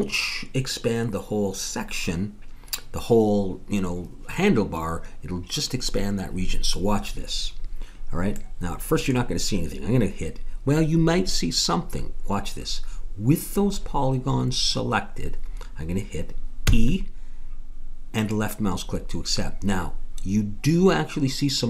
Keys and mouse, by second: 16.6 e.